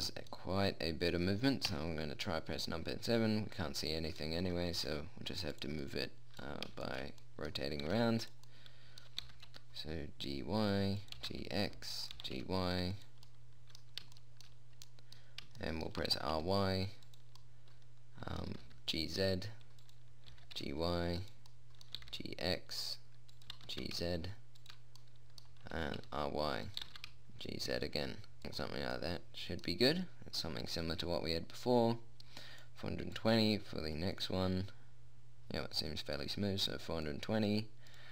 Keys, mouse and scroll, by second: 2.1 KP_7, 5.2 g, 8.3 r, 9.7 g, 11.6 g, 12.6 g, 13.7 middle click, 16.5 shift+r, 18.0 middle click, 19.0 g, 20.8 g, 22.2 middle click, 22.4 g, 24.0 g, 26.2 r, 27.2 g, 31.5-33.4 drag, 33.4 middle click, 33.6-35.4 drag.